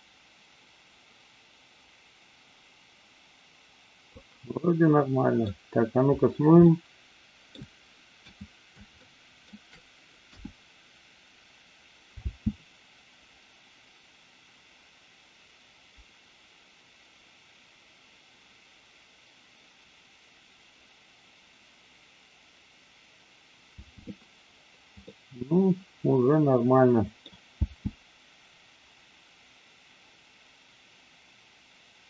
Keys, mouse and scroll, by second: 4.6-5.5 middle drag, 6.6-7.6 middle drag, 9.0-9.3 shift+middle drag, 10.2 KP_1, 12.2 space, 23.7 space, 25.1-27.2 middle drag, 27.5 space.